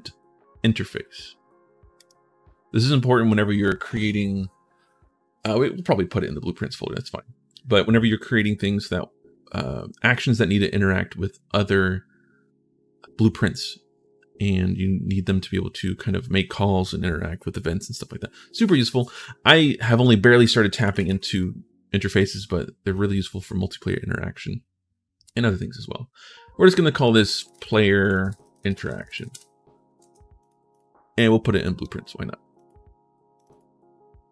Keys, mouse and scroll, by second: 1.8 click, 20.7 shift+t, 27.6-29.3 typing, 29.8 ctrl+shift+s, 30.2 click, 30.5 click, 31.0 click, 32.3 click, 33.2 click, 33.3 click.